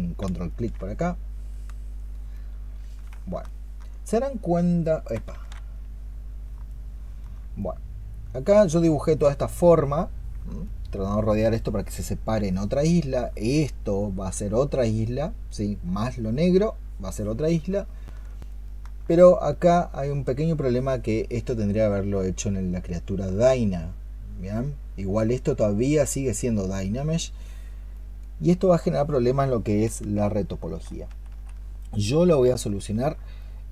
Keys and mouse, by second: 0.4 ctrl+click, 2.6 ctrl+click, 3.3 alt+click, 5.7 ctrl+z, 6.3 ctrl+z, 6.6 alt+click, 10.5 alt+click, 12.4 alt+click, 17.7 alt+click, 18.4 alt+click, 32.2 ¡, 32.4 alt+click.